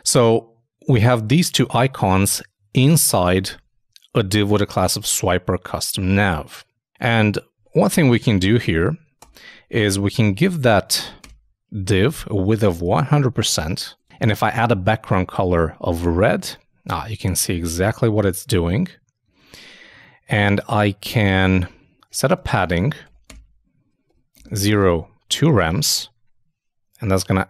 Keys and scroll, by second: 3.4 super+Tab, 10.6 shift+h, 10.8 shift+;, 11.2 shift+space, 12.8 shift+0, 13.2 shift+;, 16.3 super+Tab, 19.3 super+Tab, 20.2 super+Up, 22.6-23.5 typing, 25.4 super+;, 25.5 super+s, 25.7 super+Tab.